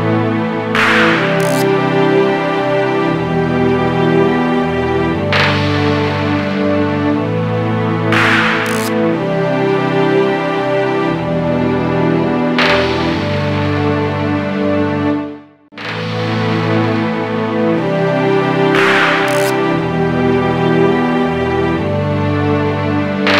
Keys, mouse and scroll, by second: 2.6 click, 3.8 n, 4.8 middle click, 9.8 shift+middle click, 11.6 alt+shift+KP_Subtract, 12.2 shift+middle click.